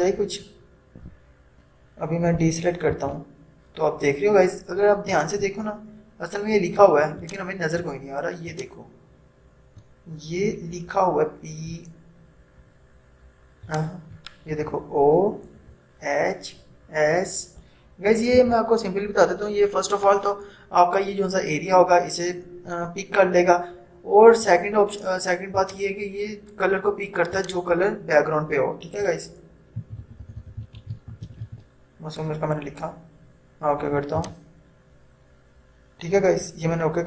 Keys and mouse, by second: 3.1 ctrl+d, 5.5 =, 7.3-11.9 drag, 11.9 =, 13.8-16.8 drag, 18.2 click, 18.4 ctrl+0, 25.7 click, 29.6-32.0 typing, 34.2 click.